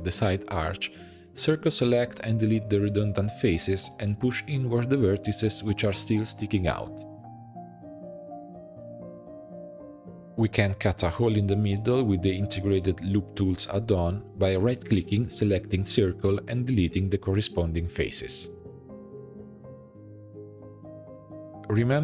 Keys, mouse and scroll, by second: 0.9 3, 1.3 c, 3.4 x, 4.1 shift+middle click, 4.4 1, 4.8 click, 5.1 g, 6.0 click, 6.1-9.9 typing, 6.9 click, 7.3 shift+middle click, 7.5 click, 8.5 click, 8.8 shift+middle click, 9.0 click, 9.4 click, 9.8 click, 10.2 Tab, 10.4 click, 10.9 Tab, 12.1 alt+a, 12.3 c, 14.7-17.0 right drag, 18.9 x, 19.6 Tab, 20.0-20.3 scroll down 1, 20.3-20.7 shift+middle drag, 20.7 click, 20.9-22.0 right drag.